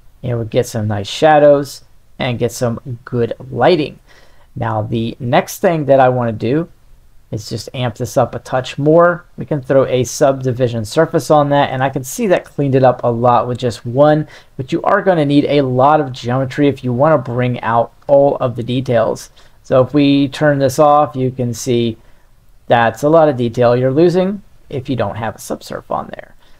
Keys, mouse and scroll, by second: 7.0 click, 7.9-10.0 drag, 11.3-11.9 middle drag, 14.0 click, 16.1 middle click, 16.7-17.9 ctrl+middle drag, 20.2 click, 21.7 click, 23.5-24.9 drag, 25.3-26.4 middle drag.